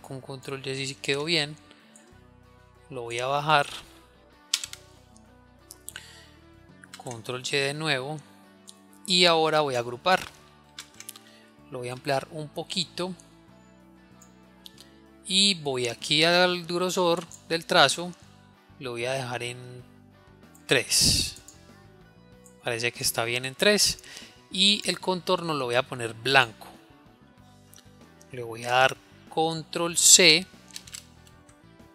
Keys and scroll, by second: 0.5 ctrl+y, 7.5 ctrl+y, 30.5 ctrl+c.